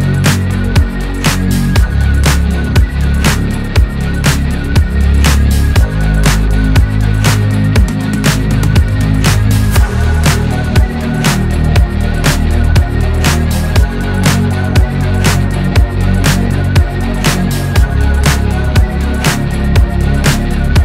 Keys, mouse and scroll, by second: 0.9 space, 1.0 click, 1.3-1.9 space, 4.3-4.8 alt+scroll down 1, 5.9-6.6 scroll up 1, 7.3 click.